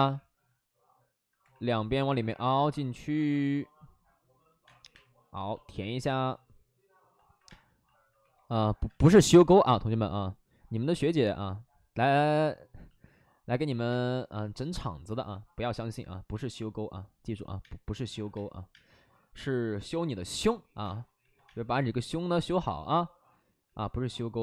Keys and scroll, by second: 1.3 2, 4.6 space, 4.8 3, 7.4 space, 8.1 2, 8.8 space, 9.1 ctrl+z, 13.8 space, 15.0 space, 17.6 space, 18.2 space, 18.6 space, 20.3 space, 20.7 space.